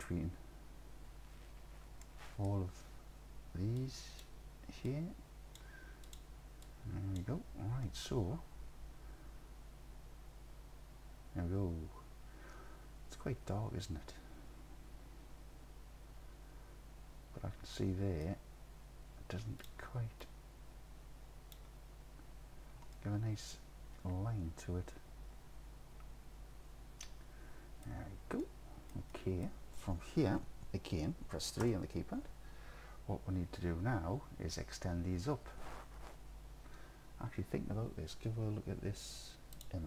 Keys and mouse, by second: 2.1 middle click, 3.9 click, 7.9-15.2 alt+drag, 15.3-18.4 alt+drag, 19.6 click, 20.2-21.6 drag, 23.0-27.9 alt+drag, 28.5 alt+click, 29.2 click, 31.7 KP_3.